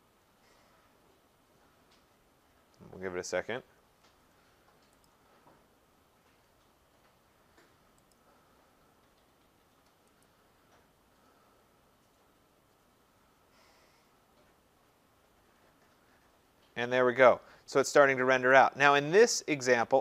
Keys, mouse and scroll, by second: 5.1 click, 7.4 click, 8.1 click, 10.3 click, 18.5 click.